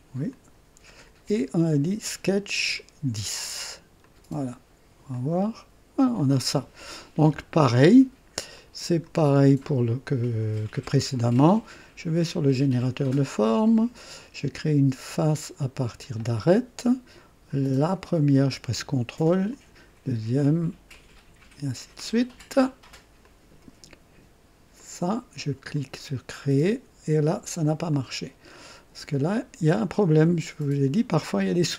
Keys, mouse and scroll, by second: 0.3 click, 2.5 click, 4.0 click, 5.1 click, 6.1-8.0 drag, 8.5-9.2 drag, 12.2 click, 16.0 click, 18.0 click, 19.5 ctrl+click, 20.9 ctrl+click, 22.0 ctrl+click, 23.2 ctrl+click, 24.8 ctrl+click, 25.7 ctrl+click, 27.9 click.